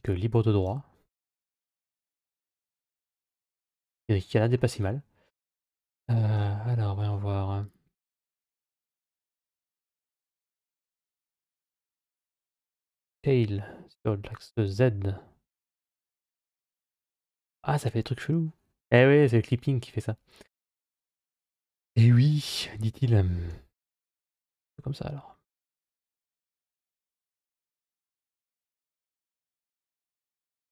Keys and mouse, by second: 1.1-4.4 middle drag, 6.2 a, 8.8 g, 12.8 s, 20.8 click, 23.3 g, 25.9 click, 26.3 click, 27.2 g, 30.2 shift+middle click.